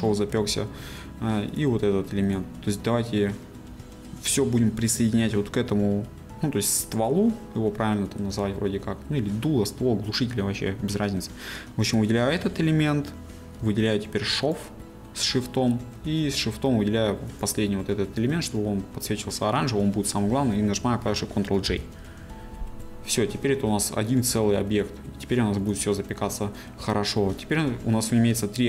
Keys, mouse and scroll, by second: 0.4 g, 1.0 right click, 1.7 g, 4.1 right click, 8.3-12.0 middle drag, 12.0 click, 22.2 ctrl+j.